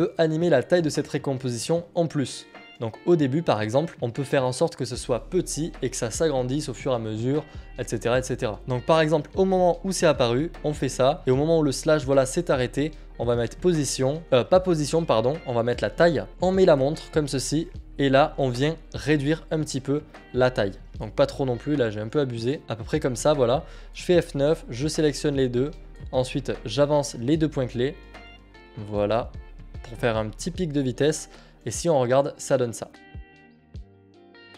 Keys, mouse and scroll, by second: 0.2 click, 4.7 click, 5.7-8.6 drag, 8.8-13.4 drag, 14.2-15.7 drag, 17.2 click, 17.2 s, 18.5 click, 18.9 click, 23.1 click, 24.9 F9, 24.9 click, 27.5 alt+scroll, 27.5 click, 30.3 click.